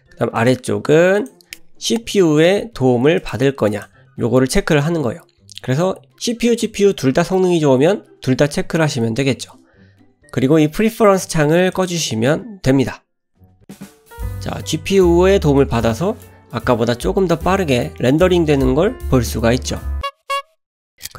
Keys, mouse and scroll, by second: 15.8 middle click, 16.2-16.6 scroll up 3, 18.0 middle click.